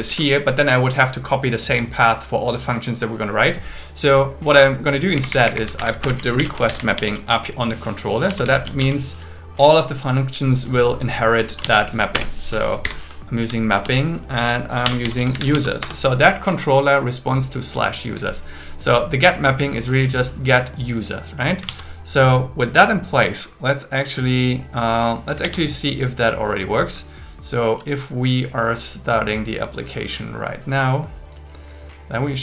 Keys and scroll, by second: 0.1 shift+super+Left, 5.2 Up, 5.9 super+Right, 6.0 Return, 6.4 alt+l, 6.7 shift+r, 11.5 shift+m, 12.1 Return, 12.9 shift+8, 13.7 shift+2, 14.9 shift+7, 15.8 Escape, 21.8 super+s, 25.5 super+1.